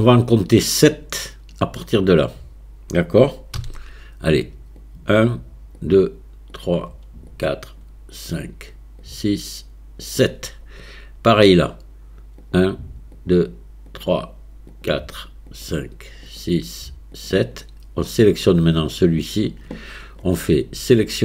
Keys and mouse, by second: 3.6 c.